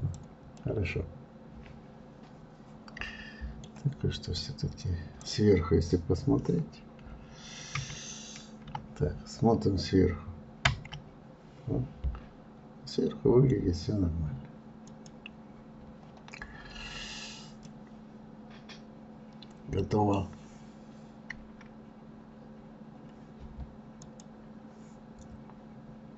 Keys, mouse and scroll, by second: 0.4-3.5 middle drag, 4.2-7.3 drag, 7.7 KP_7, 8.6 KP_7, 10.6 KP_7, 14.8 click, 17.6-20.5 middle drag, 21.4-22.3 scroll up 1, 22.3-22.9 scroll down 1.